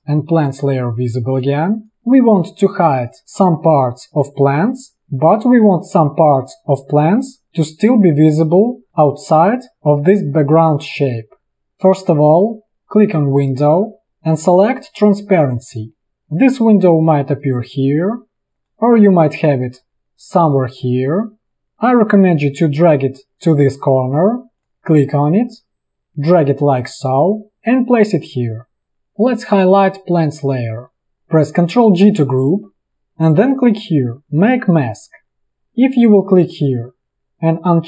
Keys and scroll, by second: 1.9 space, 2.9 space, 4.8 space, 9.0 space, 31.9 ctrl+g.